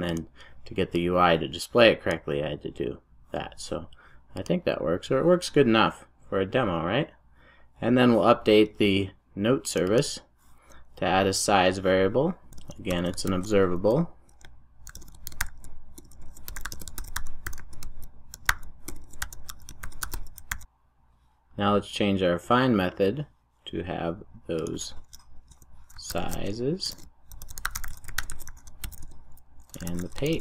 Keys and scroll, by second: 20.6 super+s.